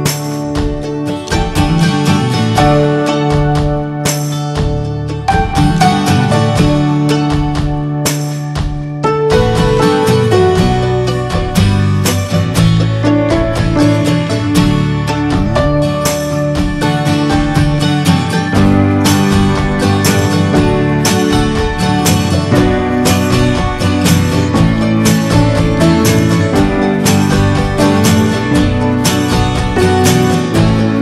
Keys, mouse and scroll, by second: 0.1-1.7 middle drag, 1.7 click, 1.9-2.7 scroll down 5, 2.2 middle click, 2.7 shift+middle click, 3.0 scroll up 2, 3.2-3.7 shift+middle drag, 3.7-4.8 scroll up 3, 4.0 middle click, 4.8-5.6 scroll down 4, 5.6 shift+middle click, 6.2 scroll up 1, 6.5-8.0 shift+middle drag, 8.0-8.6 scroll up 5, 8.6 shift+middle click, 9.0 scroll up 1, 9.2-11.0 shift+middle drag, 11.0 scroll down 2, 11.3 shift+middle click, 12.0 click, 12.3 shift+middle click, 13.0-14.7 scroll up 1, 14.7 click, 15.0 scroll down 4, 15.2 middle click, 15.4-16.3 scroll up 4, 15.8 middle click, 16.3 ctrl+z, 17.9 ctrl+click, 17.9-18.3 scroll down 2, 18.3 middle click, 19.0 ctrl+z, 19.6 scroll up 1, 19.8-21.1 middle drag, 26.2 right click, 26.9-28.7 shift+middle drag, 28.7 ctrl+click, 29.2 scroll down 4, 29.4 middle click, 29.7 scroll up 1, 30.1 ctrl+z, 30.3 middle click, 30.4 scroll up 1.